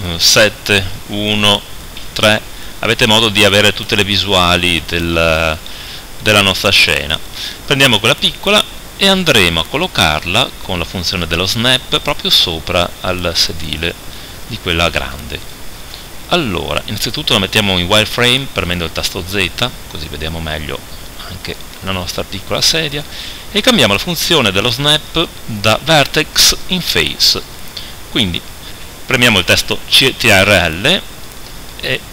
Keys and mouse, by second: 0.6 KP_7, 1.0 KP_1, 2.0 KP_3, 6.8-9.4 right drag, 7.9 g, 9.4 middle click, 9.6-11.5 drag, 14.4 KP_7, 18.7 z, 25.0-32.1 drag.